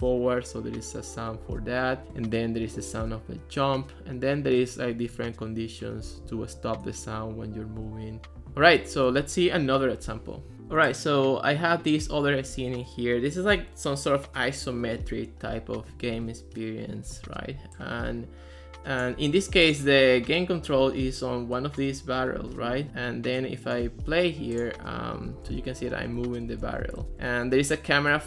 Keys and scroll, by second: 25.1-27.7 typing.